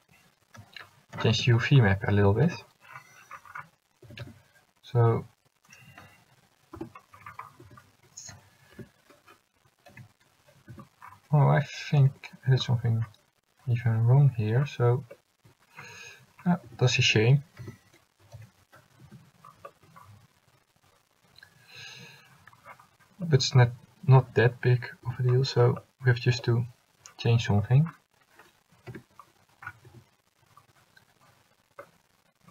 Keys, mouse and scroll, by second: 1.3 alt+h, 2.4 a, 2.5 a, 4.2 a, 4.4 a, 7.8 a, 8.9 l, 10.1 g, 12.2 g, 16.8 a, 17.8 l, 18.5 g, 23.7 a, 25.2 l, 29.0 l, 30.0 a.